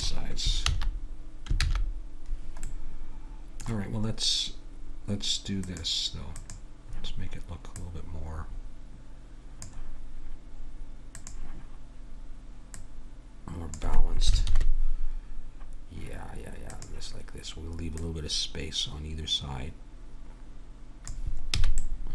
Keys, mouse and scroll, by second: 0.7 ctrl+z, 1.6 ctrl+z, 1.6-2.7 middle drag, 4.5-5.6 middle drag, 5.6-9.5 drag, 11.2-14.4 drag, 14.5 ctrl+KP_3, 16.7-19.8 drag, 21.6 a, 21.8 middle click.